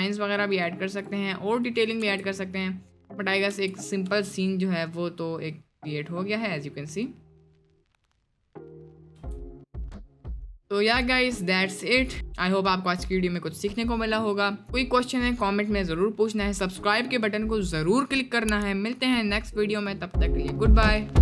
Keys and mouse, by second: 0.6 middle click, 1.0 click, 2.0 space, 3.6 space, 4.0 space, 9.2 space, 10.1 click.